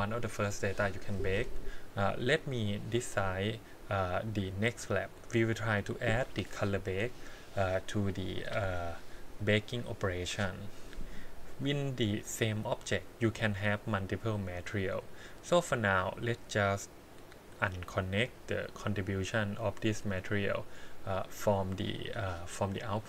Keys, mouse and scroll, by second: 4.2 click, 11.8 click, 12.3 click, 16.4 click, 17.5 click, 21.0-22.2 drag.